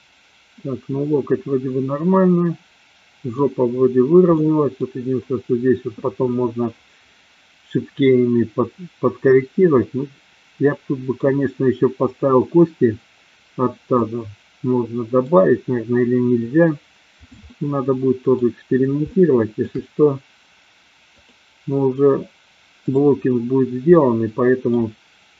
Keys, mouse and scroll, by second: 2.2-3.4 middle drag, 4.4-4.9 middle drag, 9.9-11.2 middle drag, 14.0-15.3 middle drag, 17.5 middle click, 19.2-19.7 shift+middle drag, 21.2-21.8 drag, 22.8-23.5 drag, 23.9-24.8 middle drag.